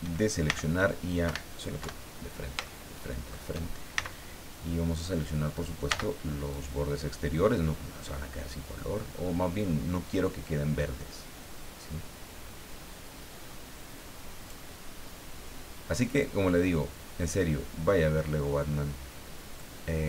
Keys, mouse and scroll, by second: 0.5 c, 1.3 Escape, 1.8 KP_1, 2.6 shift+middle click, 3.9 shift+c, 5.9 c, 6.5-14.6 drag, 16.0 click, 18.1 middle click, 19.6-20.0 drag.